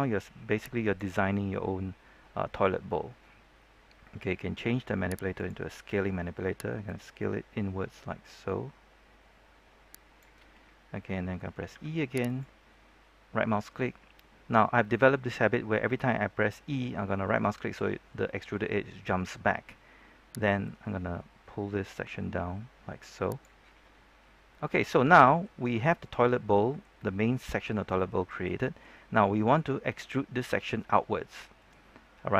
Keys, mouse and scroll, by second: 1.1-5.3 scroll down 1, 5.3-10.9 drag, 11.7 e, 12.2 right click, 19.1-20.6 scroll up 1, 20.6-24.1 drag, 24.2 scroll down 1, 24.4-32.3 middle drag.